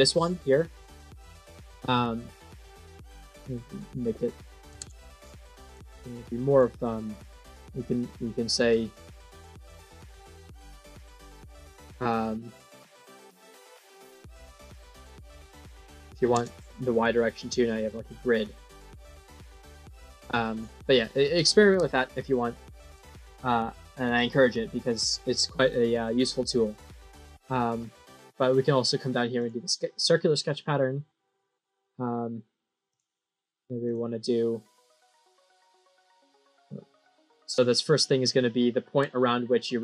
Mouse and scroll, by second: 0.7 click, 3.4 click, 3.6 click, 6.0 middle click, 9.9 click, 10.6 click, 11.3 click, 15.0 click, 15.1 click, 17.3 middle click, 17.9-18.3 scroll up 2, 18.7 middle click, 19.2 scroll down 1, 19.8 middle click, 21.2 click, 22.4 middle click, 27.9 click, 29.3 click, 32.8 click, 33.8 click, 34.7 scroll down 6, 36.2 right click, 36.8 click, 38.4-38.7 scroll up 2, 39.1 middle click.